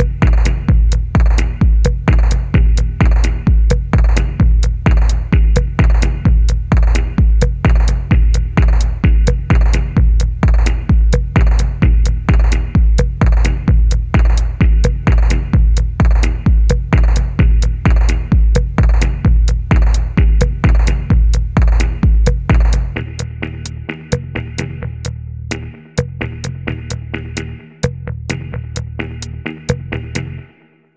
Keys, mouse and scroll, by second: 0.3 middle click, 5.5 double click, 6.6-7.8 typing, 7.9 middle click, 8.5-8.9 scroll down 1, 8.9 middle click, 10.1 scroll down 1, 10.5 shift+middle click, 13.6 ctrl+click, 14.8 ctrl+click, 17.0 middle click, 17.2-17.6 scroll up 1, 17.6 shift+middle click, 17.8-18.2 scroll up 1, 18.4 shift+middle click, 20.7 double click, 22.9 middle click, 24.3 typing, 24.6 middle click, 25.2 double click, 25.5 shift+middle click, 25.7 shift+middle click, 26.7 shift+click, 28.2 middle click, 28.7 typing.